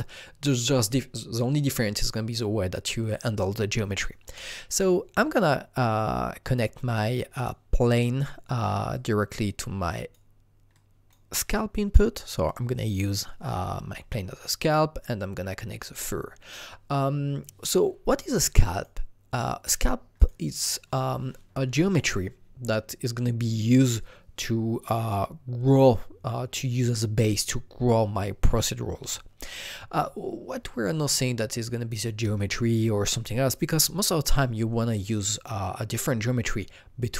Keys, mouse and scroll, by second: 4.6 alt+Num_Lock, 4.6-5.8 drag, 4.8-8.9 alt+middle drag, 5.8-8.9 drag, 8.9-14.8 drag, 18.7-20.2 drag, 20.2-22.8 drag.